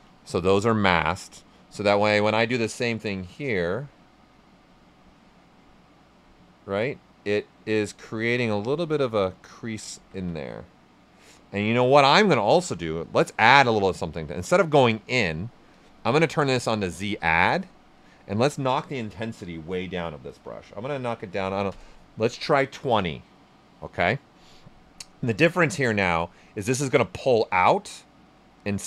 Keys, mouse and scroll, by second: 0.2 ctrl+right click, 2.7-8.1 drag, 8.1 ctrl+right click, 9.9 ctrl+z, 17.8 click, 17.9 click, 20.8-21.5 typing, 21.7 Return, 25.5 right click, 26.8-28.8 drag.